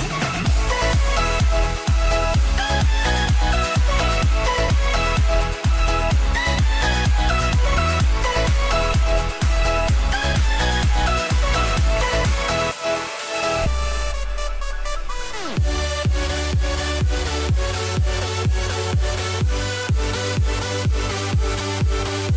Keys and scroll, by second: 0.5 ctrl+j, 16.1-16.6 typing, 17.7-18.9 typing.